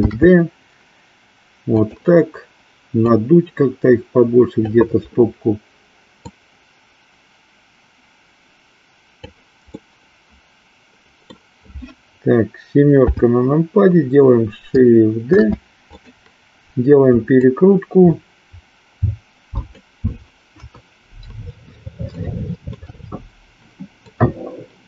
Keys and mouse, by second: 1.8 click, 2.9-4.8 drag, 6.2-9.4 drag, 9.8-11.4 middle drag, 13.0 KP_7, 15.4 shift+d, 16.0 click, 17.4-19.8 drag, 20.7 KP_1, 22.0 shift+middle click, 24.0-24.8 drag.